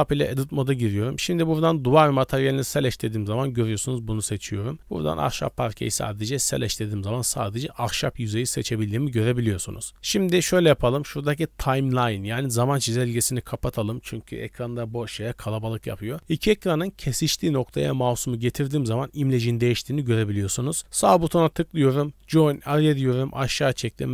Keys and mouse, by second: 0.4-2.3 middle drag, 5.4 click, 6.5-8.4 drag, 9.3 click, 22.5-24.1 drag.